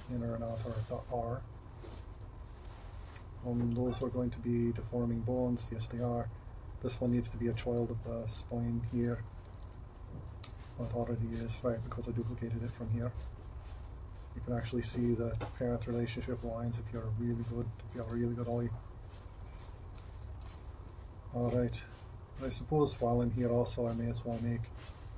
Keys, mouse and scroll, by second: 0.0 ], 0.5 [, 0.8 ], 9.5 super+p.